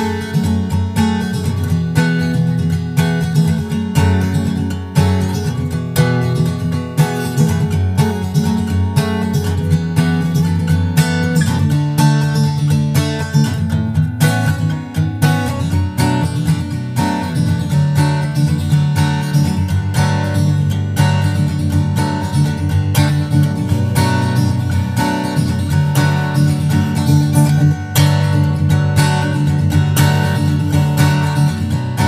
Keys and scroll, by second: 4.0 super+Right, 4.6 super+s, 4.7 super+Tab, 5.3 super+Tab, 5.4 super+Tab, 6.4 super+Tab, 6.7 super+Tab, 8.5 shift+super+Left, 8.7 super+c, 9.1 super+v, 9.9 super+Left, 12.8 super+Right, 13.2 super+v, 13.4 super+Left, 17.5 super+Right, 18.1 super+v, 18.8 super+Right, 25.1 super+s, 25.3 super+Tab, 25.7 super+Tab, 25.9 super+Tab, 26.0 super+Tab, 27.1 super+Tab, 31.5 super+s.